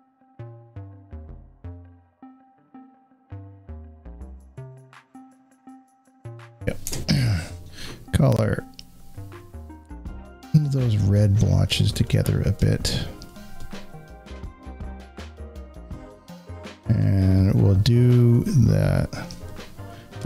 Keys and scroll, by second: 6.7 alt+w.